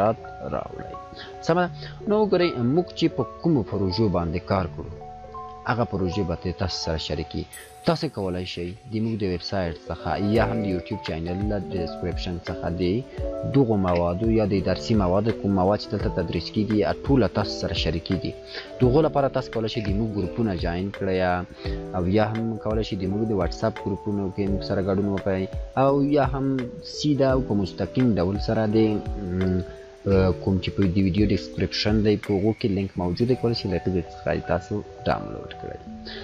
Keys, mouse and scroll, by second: 2.6 click, 5.0-7.3 drag, 14.0-15.0 drag, 21.0 scroll up 1, 30.2 scroll up 1.